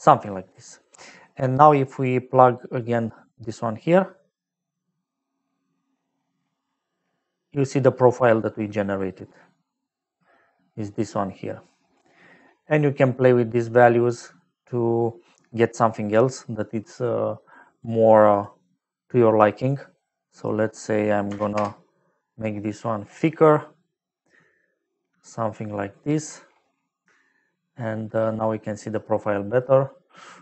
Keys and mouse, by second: 0.7 middle click, 1.7 click, 2.8 click, 3.9 click, 6.1 middle click, 6.3 middle click, 6.6 middle click, 7.4 middle click, 10.8 middle click, 12.8 middle click, 14.9 middle click, 18.3 click, 19.9 click, 21.3 KP_1, 21.5 Return, 24.5 middle click, 27.0 middle click.